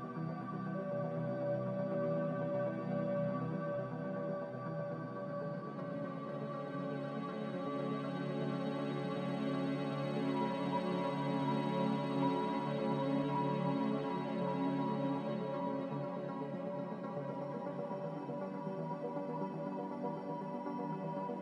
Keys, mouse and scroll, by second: 0.1 Return, 9.5 b, 12.7 z.